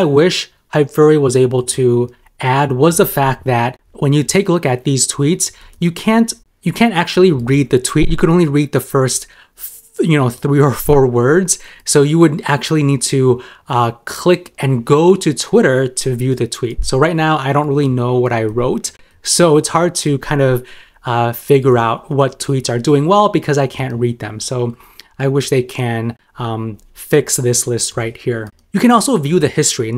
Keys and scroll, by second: 6.8 super+m, 8.6 super+m, 10.4 super+m, 16.4 super+m, 18.4 super+m, 19.9 super+m, 23.7 super+m.